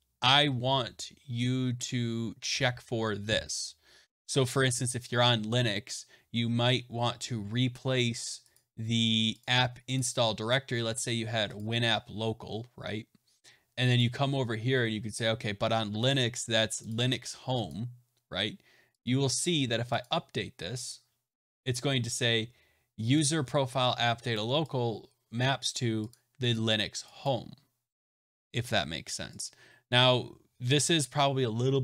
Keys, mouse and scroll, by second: 8.5 click, 9.3 click, 9.9 click, 11.5 click, 13.9 click, 17.6 click, 19.0 click, 19.9 click, 26.0 click, 26.5 click, 27.2 click, 29.4 click.